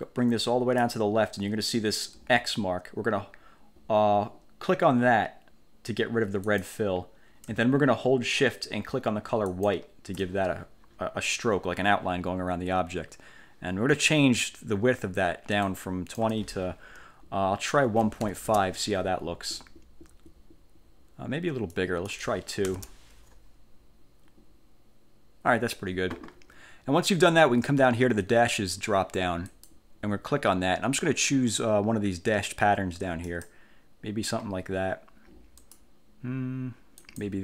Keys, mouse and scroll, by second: 6.6 click, 9.6 shift+click, 15.7 click, 17.7-18.8 typing, 21.9 click, 22.8 2, 29.6 click, 33.3 click, 35.7 click, 37.1 click.